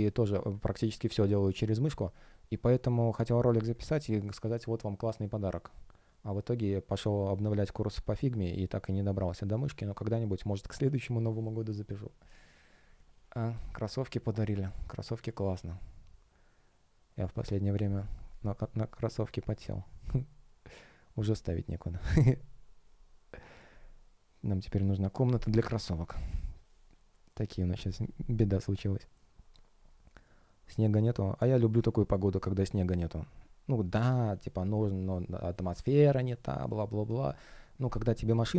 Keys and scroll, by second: 1.1 shift+o, 3.3 space.